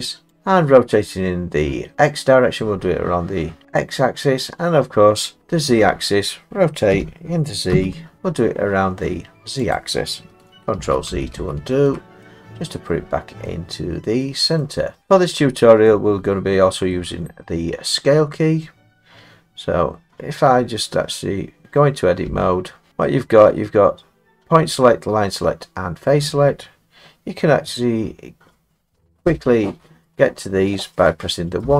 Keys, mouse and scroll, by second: 0.4 click, 6.9 r, 7.7 z, 9.8 click, 10.8 ctrl+z, 11.1 ctrl+z, 11.3 ctrl+z, 12.2 middle click, 12.3 middle click, 12.9 middle click, 13.0 middle click, 13.1 middle click, 14.6 middle click, 15.0 middle click, 15.1 middle click, 15.4 middle click, 15.8 middle click, 16.9 middle click, 22.3 Tab, 31.6-31.7 typing.